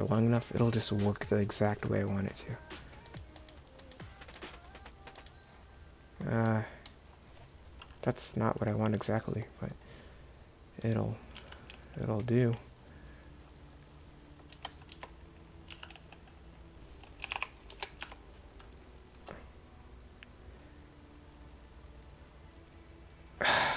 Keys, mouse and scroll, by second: 11.4 r, 15.0 Tab, 15.8 r, 18.1 Tab.